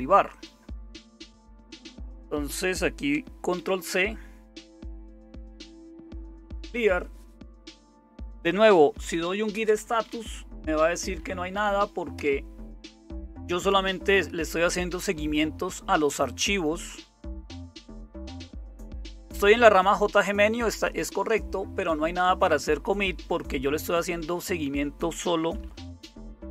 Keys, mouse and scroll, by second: 0.0-26.5 typing, 3.6 ctrl+c, 12.1 Return.